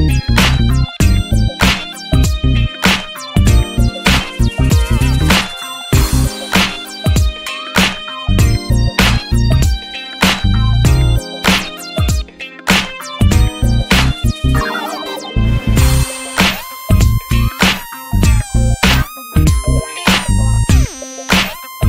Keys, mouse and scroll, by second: 0.0 Tab, 0.2 a, 0.3 scroll up 4, 0.5 shift+middle click, 1.0 ctrl+b, 3.4 Tab, 3.5 click, 3.6-4.1 right drag, 4.1 scroll up 2, 4.3 middle drag, 4.5 click, 5.0 ctrl+1, 5.4-5.8 drag, 5.8 ctrl+s, 6.2 click, 7.4 click, 10.8 click, 14.1-14.8 drag, 14.8-15.2 scroll down 3, 15.2 scroll up 2, 17.4 click, 17.5 scroll down 3, 17.7 Tab, 17.9 alt+middle click, 18.1 alt+middle click, 18.3 alt+z, 18.8 click, 19.7 t, 20.2 click, 21.6 click.